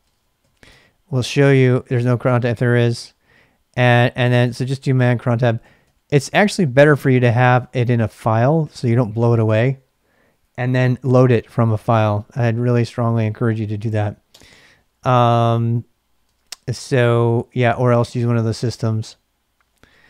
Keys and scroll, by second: 0.0-0.9 typing, 4.2-9.2 typing, 14.3 space, 16.2 space, 17.1 ctrl+a, 17.3 ctrl+a, 18.1-20.0 typing.